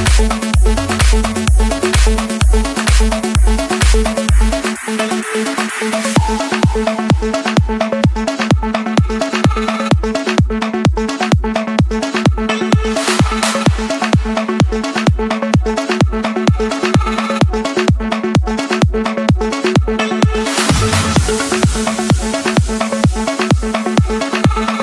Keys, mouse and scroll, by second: 0.4 click, 1.2 scroll, 1.4-2.4 scroll, 2.4 scroll, 2.9-4.0 scroll, 4.1 right click, 5.5 click, 7.5 click, 10.2 click, 11.6 click, 12.0 scroll, 13.1 click, 13.5-14.1 scroll, 14.3 Escape, 15.7-17.3 typing, 17.4 Return, 18.2 click, 19.4 click, 20.2 Return, 22.1 click, 23.2 scroll, 23.5 Escape.